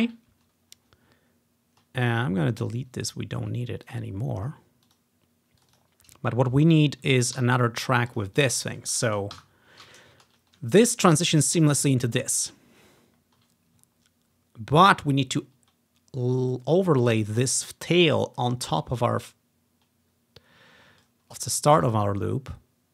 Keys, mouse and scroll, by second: 0.8-1.6 scroll down 2, 1.7 typing, 3.9 click, 4.1 click, 5.1 click, 5.8 click, 5.9 click, 6.4 ctrl+click, 6.4 scroll down 1, 7.2 scroll down 1, 7.5 ctrl+d, 8.2-10.2 drag, 9.4 Delete, 10.4-11.5 ctrl+scroll up 1, 11.5-11.9 scroll up 1, 11.5 typing, 12.4-13.1 ctrl+scroll down 1, 13.1-14.4 ctrl+scroll down 1, 14.4-15.2 ctrl+scroll up 1, 16.6 click, 17.2 click, 19.2-19.9 ctrl+scroll up 2, 20.2-20.8 ctrl+scroll down 2, 20.3 typing, 20.8 ctrl+scroll up 1, 21.9 click, 22.5-22.9 ctrl+scroll up 1.